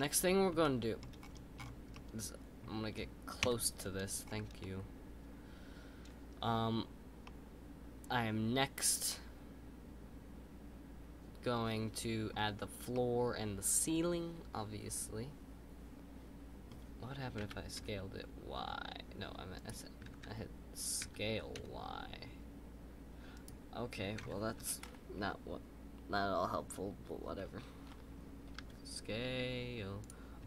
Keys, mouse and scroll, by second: 1.1-1.9 scroll up 10, 1.9-3.4 middle drag, 3.4 KP_Decimal, 4.2-4.6 scroll up 2, 4.6-10.2 middle drag, 12.9-16.0 middle drag, 20.1 ctrl+z, 21.0 s, 24.2 ctrl+z.